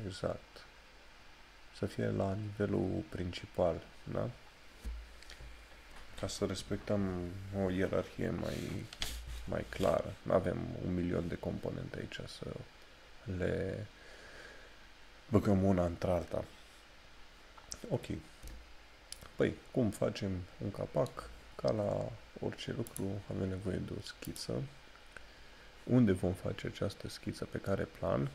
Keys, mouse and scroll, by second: 17.7 scroll down 1, 23.0 click.